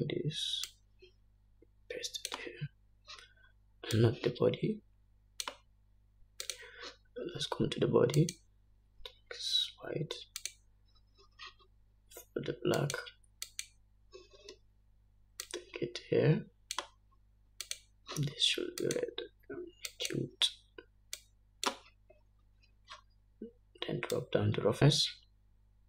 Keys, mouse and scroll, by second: 2.4-4.1 drag, 5.8 click, 8.2 click, 10.1-12.4 drag, 14.6 click, 15.4 click, 17.3-18.7 drag, 19.6 click, 20.5-22.1 drag, 25.1 scroll down 2.